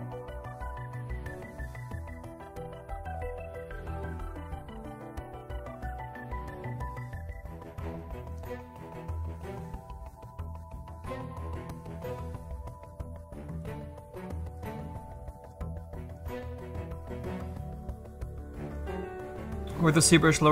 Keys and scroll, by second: 1.2 s, 3.0 s.